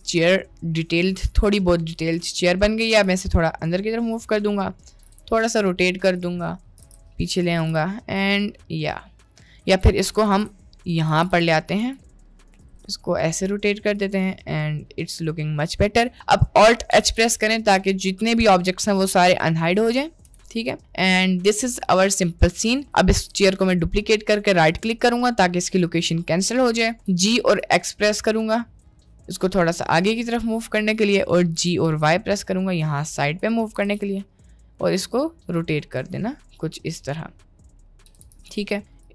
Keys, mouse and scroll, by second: 0.1-1.0 middle drag, 1.4 click, 2.2 middle click, 2.9 g, 4.5-4.8 middle drag, 5.0 r, 6.4 middle click, 6.8 g, 7.6 g, 8.5 middle click, 9.7 middle click, 9.9 g, 10.3 g, 11.2 g, 12.6 r, 14.5-15.4 middle drag, 16.9 alt+h, 17.8 click, 20.2 KP_Decimal, 22.5 click, 23.2 shift+d, 27.1 g, 31.6 g, 33.8 r, 36.5 middle click, 37.1 middle click, 38.3 g.